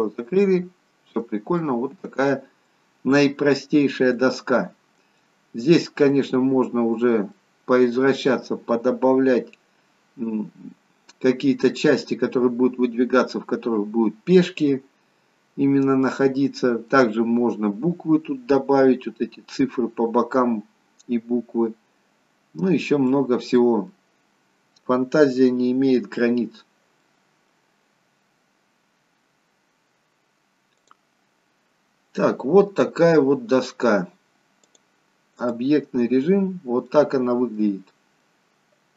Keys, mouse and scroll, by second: 1.5 middle click, 3.5-4.1 scroll down 2, 4.1 middle click, 6.3-7.2 scroll up 2, 7.2 middle click, 7.2-8.9 scroll up 2, 14.2-14.7 scroll down 2, 14.7 middle click, 22.6-24.0 scroll down 2, 23.1 middle click, 24.6-25.4 scroll up 3, 25.4 middle click, 26.6-27.3 scroll down 2, 27.3 middle click, 30.9 click, 32.1-32.7 scroll up 1, 32.7-33.8 scroll down 1, 34.7 click, 36.4-36.9 scroll down 1, 36.9 middle click, 37.9-38.9 scroll up 2, 38.3 middle click.